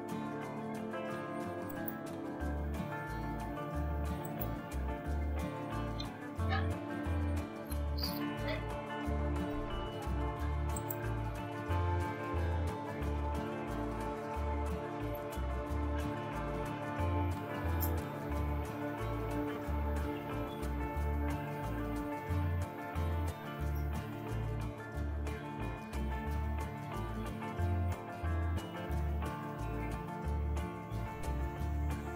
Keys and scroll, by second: 5.4-7.1 typing, 14.6 typing, 15.7-21.3 typing, 21.7 Return, 23.3 Up, 23.5 Up, 24.4 Up, 25.4 Up, 26.8 Return.